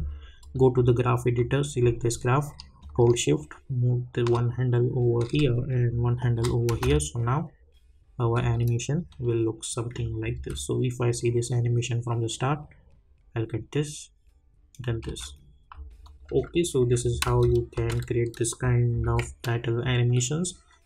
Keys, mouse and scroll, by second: 0.4-5.3 drag, 5.3-6.7 drag, 6.7 space, 9.1 click, 10.3 space, 15.0 space, 16.0 click, 16.3 u, 16.8 u, 17.2 space, 19.0 n.